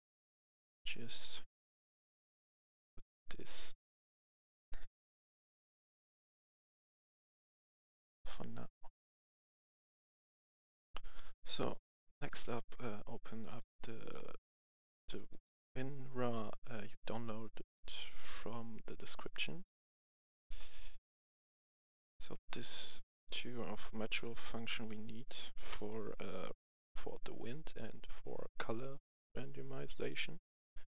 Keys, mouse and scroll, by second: 5.0 Delete, 5.5-6.7 drag, 10.9 F10, 11.3-13.3 drag, 16.8 right click, 20.3 click, 25.6 ctrl+c.